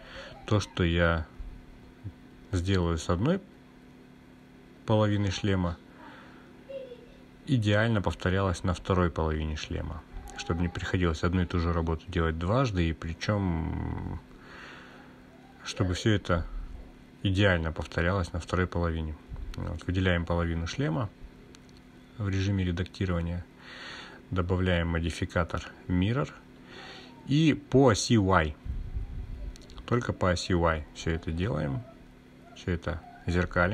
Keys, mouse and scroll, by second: 0.6 click, 4.4-5.4 scroll down 2, 5.4 click, 7.0-11.4 drag, 12.9-17.4 drag, 15.4 Delete, 19.2-22.2 drag, 23.8 click, 24.9-27.0 drag, 29.8 click, 30.5 click.